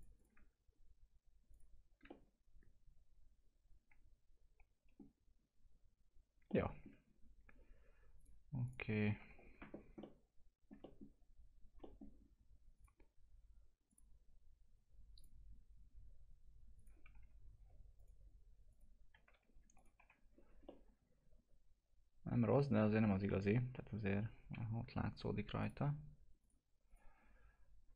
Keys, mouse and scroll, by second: 2.2-7.0 alt+middle drag, 7.0 scroll down 1, 8.2 click, 9.2 F4, 9.7 scroll down 1, 10.0 alt+middle click, 10.8 middle click, 11.1 scroll down 1, 11.8 middle click, 12.2-12.7 scroll up 1, 12.7 click, 17.2 F4, 17.4 scroll up 1, 18.0 click, 19.3 alt+q, 19.8 click, 20.0 F4, 20.3 scroll up 1, 20.7-23.5 alt+middle drag, 23.5-23.8 scroll up 1, 24.5 F4, 25.6 click.